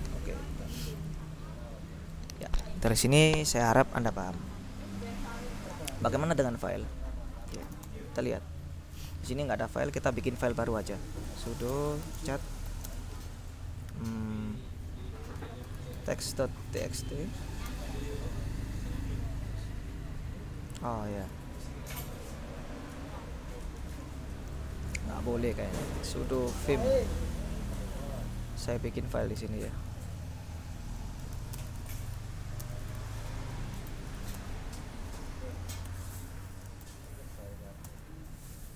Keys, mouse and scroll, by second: 0.9 ctrl+u, 7.5-8.4 typing, 11.1-13.0 typing, 15.5-17.6 typing, 17.8 Return, 20.8 Up, 21.4 BackSpace, 24.6 BackSpace, 26.3-27.3 typing, 29.5 i, 31.1-34.8 typing, 35.9 Escape, 36.7-37.6 typing, 37.9 Return.